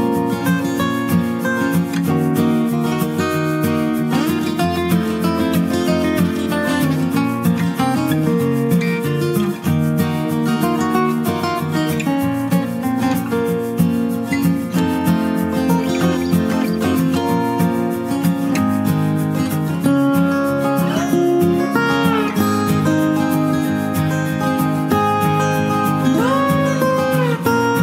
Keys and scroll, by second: 8.2 ctrl+j.